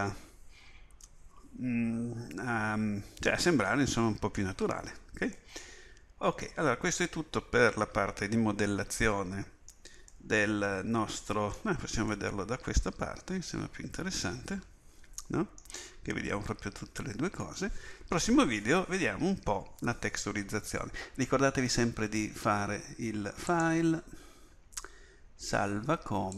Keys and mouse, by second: 5.6-7.3 middle drag, 10.2-10.6 middle drag, 23.5-25.4 drag.